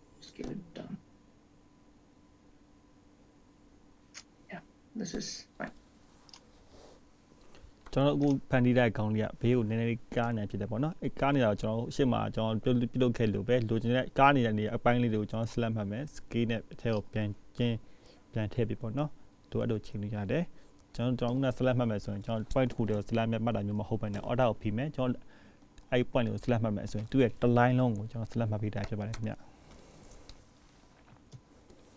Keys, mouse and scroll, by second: 5.7-6.9 scroll down 6, 6.9-8.5 scroll up 2, 7.0 click, 8.5 click, 9.6-10.6 scroll down 1, 10.6-11.7 scroll up 6, 12.1 click, 14.2 click, 15.0 click, 17.2 click, 18.2 click, 22.0 click, 22.9-24.1 scroll down 7, 24.1 click, 24.5-25.0 scroll up 5, 27.0 scroll up 1, 30.1 alt+click, 31.5 s.